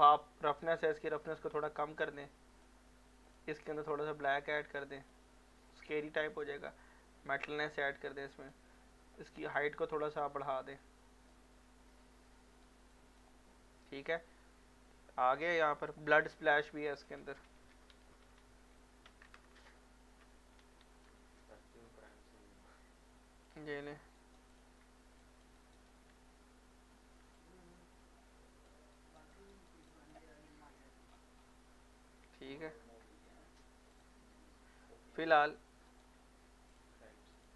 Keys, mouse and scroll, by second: 1.2-2.8 drag, 15.8 alt+click, 17.7 alt+b, 17.9 alt+l, 18.2 alt+o, 18.4 alt+d, 19.3 alt+BackSpace, 20.6 alt+s, 20.8 alt+p, 21.1 alt+l, 23.5 alt+click, 24.2 ctrl+alt+right click, 24.5 alt+click, 25.6 alt+right click, 27.3-28.9 alt+drag, 28.9 alt+right click, 29.9 alt+click, 30.3 alt+middle click, 31.1 scroll down 1, 31.9 alt+middle click, 32.8-33.9 scroll up 1, 33.9 click, 35.1 click, 35.9 right click, 36.7 click.